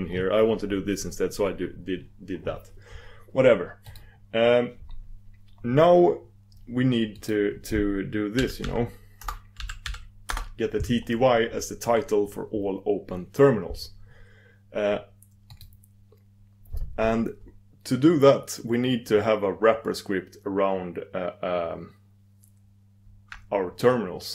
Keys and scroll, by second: 4.0 super+d, 10.2 super+d.